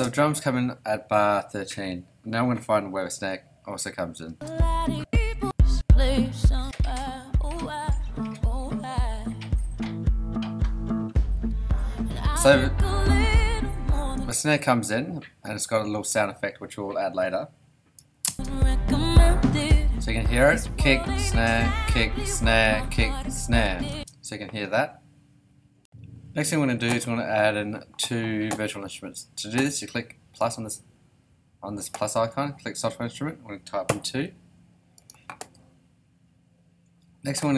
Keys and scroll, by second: 4.3 space, 4.8 •, 14.1 space, 18.2 space, 23.9 space, 33.9 2.